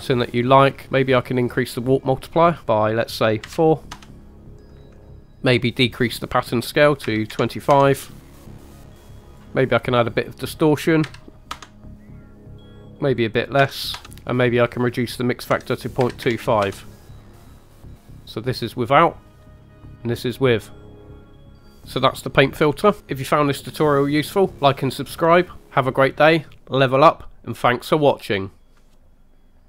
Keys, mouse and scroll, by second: 0.8 click, 1.4 click, 2.6 click, 4.8 drag, 6.0-7.8 drag, 8.1 shift+middle click, 8.8 click, 9.5 middle click, 10.1-11.6 drag, 12.9 click, 14.7-16.8 drag, 18.2 click, 19.3-28.2 drag.